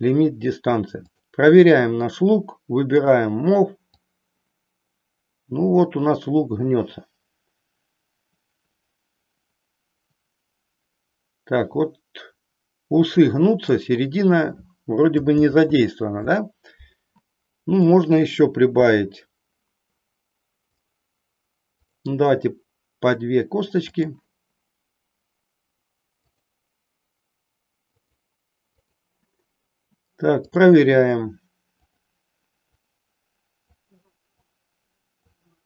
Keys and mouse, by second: 1.0 click, 3.9-13.8 drag, 15.4 ctrl+z, 17.8-19.4 drag, 20.7 click, 21.8 click, 26.3 click, 27.9 click, 28.7 click, 30.4-31.9 drag, 33.5-35.3 drag.